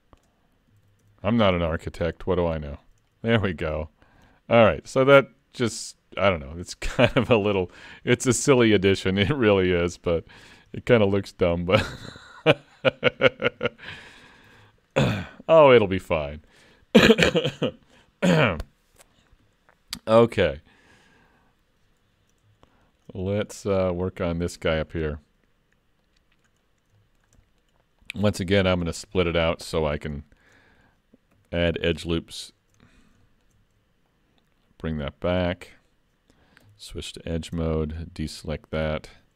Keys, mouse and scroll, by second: 0.8 alt+a, 1.0 Tab, 1.5 scroll down 4, 1.6 middle click, 2.3 scroll down 2, 2.7 shift+middle click, 3.1 middle click, 3.6-3.9 scroll up 3, 3.9 shift+middle click, 4.3-4.9 scroll down 1, 4.9 middle click, 4.9-5.6 scroll down 1, 5.9 scroll up 2, 6.6-7.1 scroll down 2, 7.2 shift+middle click, 7.7 middle click, 9.8 middle click, 10.5-11.1 scroll up 3, 10.8 shift+middle click, 11.0 shift+middle click, 11.9-12.6 scroll down 2, 12.6-13.5 scroll down 11, 13.6 shift+middle click, 14.5 alt+a, 14.9 middle click, 22.7 shift+middle click, 23.3 scroll up 2, 23.6 shift+middle click, 24.0-25.7 scroll up 1, 26.0 middle click, 26.7-27.0 scroll up 4, 27.1 shift+middle click, 27.4 middle click, 28.0 click, 28.6 Tab, 28.9 scroll up 2, 29.2 shift+middle click, 29.5 scroll up 1, 29.6 middle click, 30.3 shift+middle click, 30.7 middle click, 31.4 3, 31.8 click, 32.4 shift+click, 32.9 middle click, 33.3 shift+middle click, 34.1 click, 35.6 middle click, 36.6 2, 37.8 shift+click, 38.9 ctrl+e.